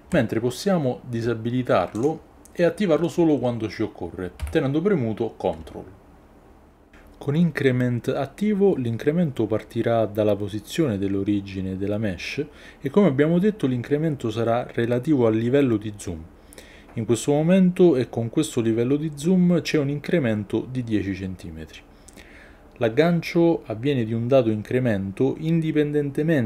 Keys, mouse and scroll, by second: 2.0 click, 4.4 g, 21.8 g.